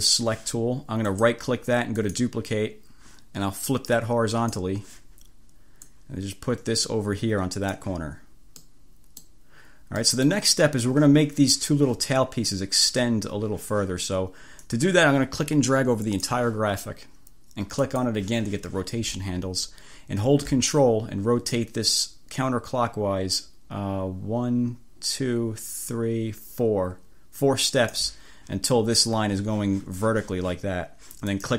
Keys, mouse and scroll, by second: 0.1 click, 1.2-1.5 scroll up 1, 2.1-2.5 scroll up 1, 4.4-4.9 scroll up 1, 5.9-8.1 scroll up 1, 8.7 scroll up 1, 8.9 click, 10.1 click, 14.7-16.5 drag, 17.9 click, 21.6-28.2 drag, 31.4 click.